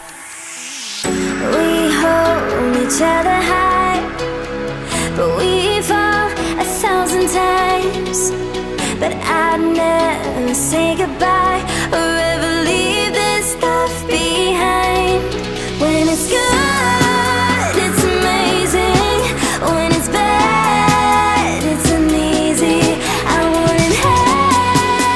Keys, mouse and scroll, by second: 5.4 right click, 6.6 click, 9.3-14.2 drag, 20.0 Right, 21.6 click.